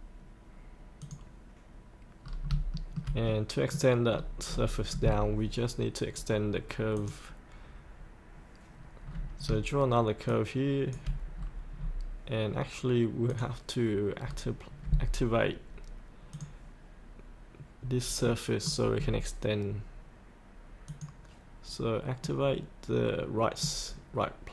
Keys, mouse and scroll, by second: 2.2 scroll up 1, 2.7 shift+middle click, 3.3 middle click, 4.1-7.0 scroll down 2, 7.0 click, 9.0-9.4 scroll down 1, 10.3 shift+click, 11.3-11.8 scroll up 1, 13.3 click, 14.2-16.3 scroll up 1, 16.3-17.3 drag, 18.2 middle click, 18.7 scroll up 1, 18.9-20.9 scroll down 1, 20.9 click, 22.2-24.4 middle drag.